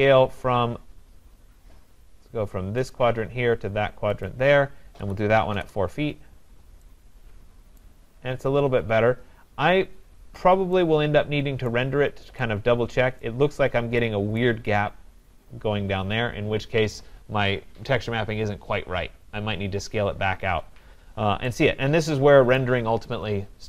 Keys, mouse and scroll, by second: 2.9 click, 3.2 typing, 4.3 click, 5.1-5.6 typing, 7.8 right click, 8.1 middle click, 8.2 middle click, 8.9 middle click, 9.2 middle click, 9.7-10.2 scroll, 11.7 right click, 12.0-12.8 scroll, 13.2 right click, 13.7 scroll, 14.4 right click, 22.5 right click.